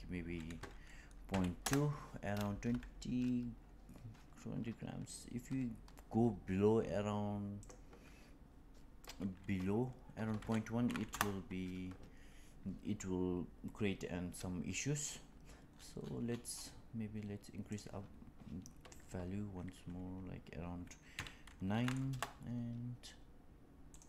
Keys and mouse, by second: 7.7-13.3 drag, 17.7-23.3 drag, 23.9-24.0 drag.